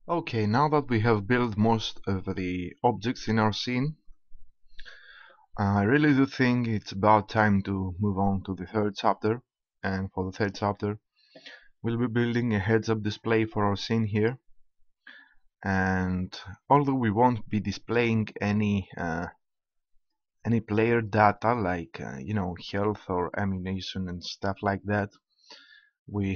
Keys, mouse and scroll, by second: 4.1 KP_0, 11.1-12.8 middle drag, 13.0-14.7 drag.